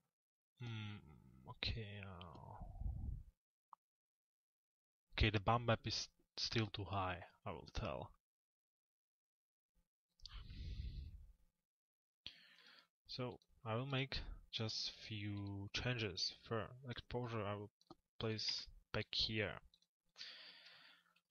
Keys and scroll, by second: 18.1 Return, 20.7 p.